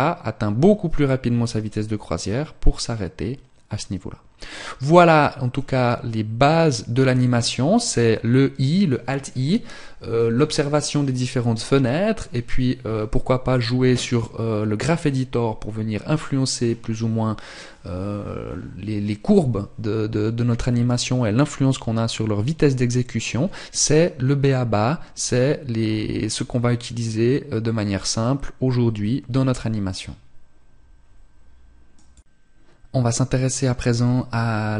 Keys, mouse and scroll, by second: 13.4 click.